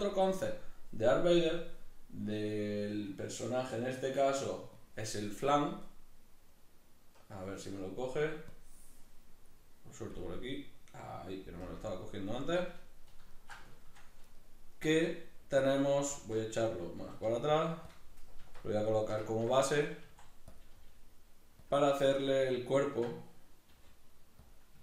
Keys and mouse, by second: 14.2 right click, 14.9 s, 15.7 click, 16.2 alt+q, 18.0 click, 18.4 alt+q, 19.0-20.6 shift+middle drag, 20.0 s, 20.6 click, 20.8 g, 21.7 click, 21.9-24.5 ctrl+middle drag, 23.7 g, 24.5 click.